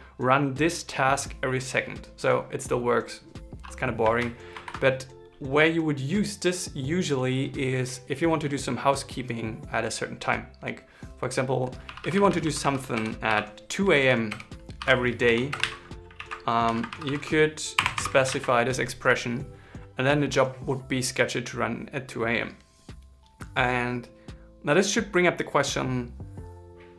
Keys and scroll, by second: 15.9 super+s, 17.4 super+Right, 17.7 shift+ß, 18.0 super+s.